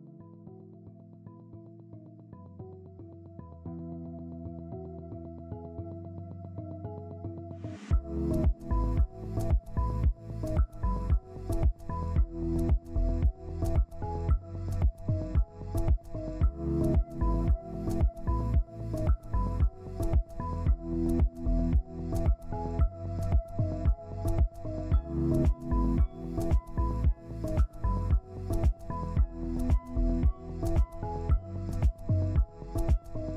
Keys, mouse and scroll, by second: 17.4 ctrl+space, 18.4 scroll down 1, 18.9 typing, 20.4 ctrl+space, 21.9 scroll down 1, 24.2 z, 25.7 ctrl+space, 29.9 scroll down 1, 30.2 z, 31.4 ctrl+space, 32.0 double click.